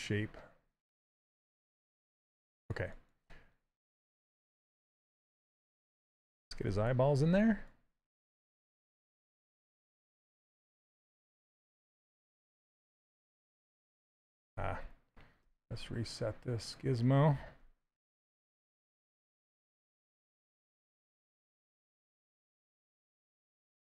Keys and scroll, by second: 14.7 ctrl+z, 15.1 w, 17.3 q, 22.5 w.